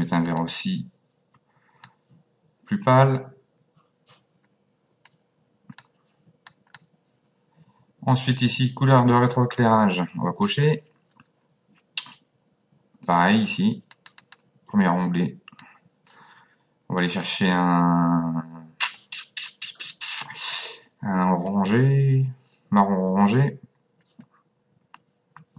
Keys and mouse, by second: 0.2 click, 1.8 click, 6.5 click, 10.4 click, 13.9 click, 15.6 click, 21.5 click.